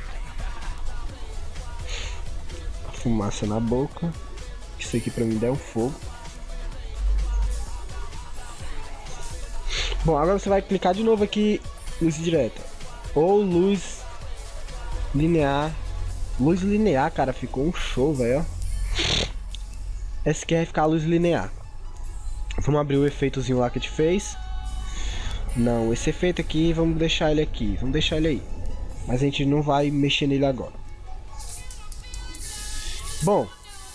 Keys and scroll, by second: 17.4 ctrl+0, 30.1 ctrl+=, 30.9 ctrl+9, 31.1 ctrl+0, 31.9 ctrl+=, 32.2 ctrl+0.